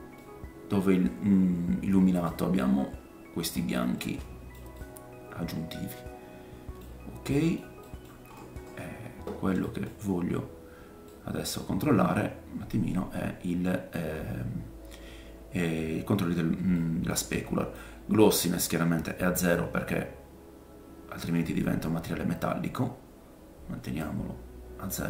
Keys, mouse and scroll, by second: 0.1 middle click, 2.3-3.2 scroll down 3, 4.0 middle click, 4.7 middle click, 7.5-12.9 middle drag, 8.4-9.6 scroll up 3, 10.1-11.1 scroll up 5, 11.7-12.1 scroll up 2, 16.7 middle click, 17.7 click.